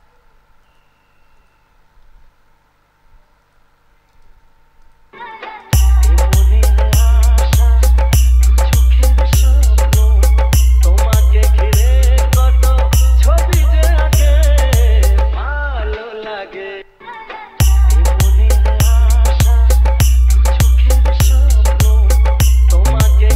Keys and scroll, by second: 5.3 space, 17.0 space.